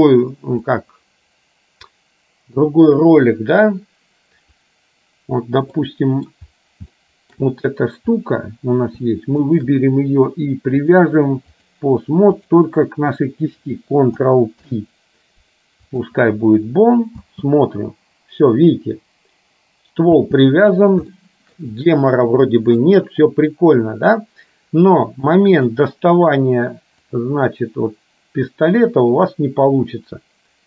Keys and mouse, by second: 0.7-2.0 drag, 2.7 Delete, 6.0 middle click, 7.1 shift+middle click, 9.7 shift+click, 11.1 click, 14.6 ctrl+p, 17.5 space, 21.2 shift+middle click, 25.7 click, 27.3-30.6 drag.